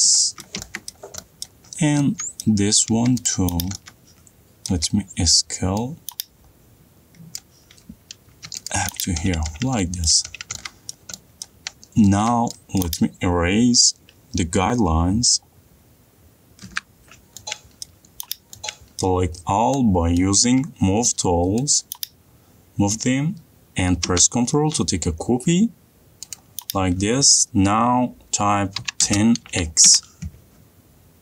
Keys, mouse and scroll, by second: 0.8-1.1 middle click, 1.5 middle click, 1.7 middle click, 2.0 middle click, 2.3 middle click, 2.3 shift+middle click, 2.7 middle click, 2.9 middle click, 3.6 middle click, 3.6 click, 3.8 middle click, 4.1 middle click, 5.0 middle click, 5.0 s, 7.7 click, 8.6 click, 9.0 click, 9.2-9.5 scroll down 1, 9.5 scroll down 3, 10.2-10.6 scroll down 8, 10.6 middle click, 11.8 middle click, 12.0-12.6 scroll up 4, 12.6 middle click, 13.1 click, 17.0 Delete, 18.1 middle click, 18.6 click, 19.5 middle click, 19.5 middle click, 19.9 middle click, 20.5 middle click, 20.8 m, 22.1 click, 26.7 click, 29.2-30.2 typing.